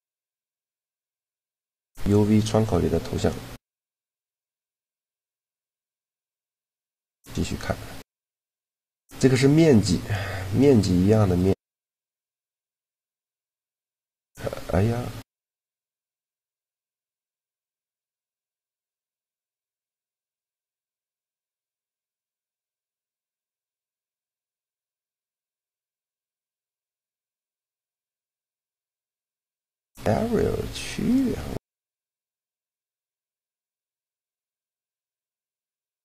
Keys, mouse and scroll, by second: 0.6-3.0 middle drag, 3.0-4.8 drag, 3.8 right click, 5.8 alt+z, 6.8 shift+g, 10.2-11.4 drag, 11.4 shift+g, 12.1 right click, 13.0-14.7 middle drag, 18.1 middle click, 18.6 right click, 19.5-22.4 drag, 22.4 shift+g, 26.1-28.0 middle drag, 29.6 middle click, 30.8-32.3 right drag, 32.9 shift+g.